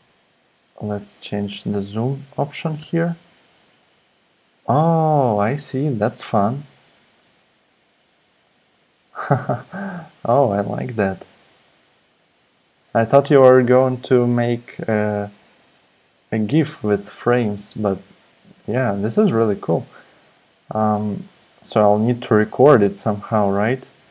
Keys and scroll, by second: 0.0 super+z, 2.8 super+r, 7.2 super+r, 14.7 super+r.